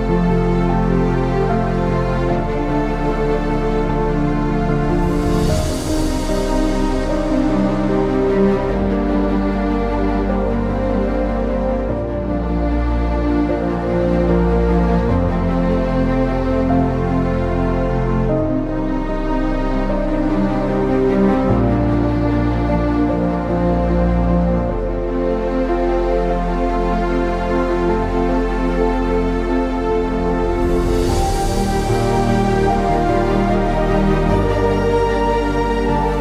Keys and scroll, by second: 0.0-3.6 typing, 5.0 typing, 7.0 typing, 8.3-18.6 typing, 14.7 ctrl+z, 19.9-22.0 typing, 23.1-23.9 typing, 25.7-27.4 typing, 30.1-33.7 typing, 34.9-35.6 typing.